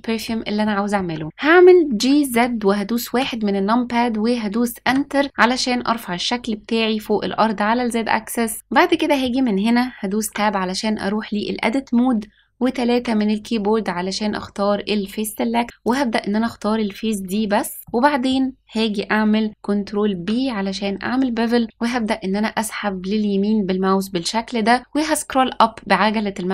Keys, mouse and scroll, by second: 0.6-0.9 shift+middle drag, 1.8 g, 8.5 scroll up 1, 8.8 middle click, 10.2 Tab, 12.9 3, 15.8 click, 17.1-17.8 scroll up 2, 17.8 middle click, 20.0 ctrl+b.